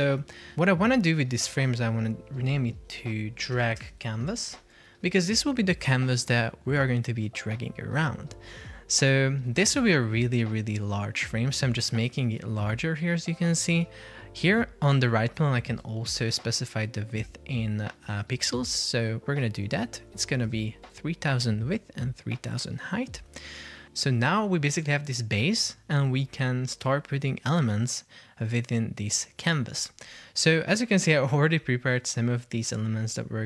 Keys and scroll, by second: 3.4 shift+d, 3.9 space, 4.2 shift+c, 4.7 Return, 18.1 Return, 19.8 super+c, 20.5 super+v, 20.9 Return.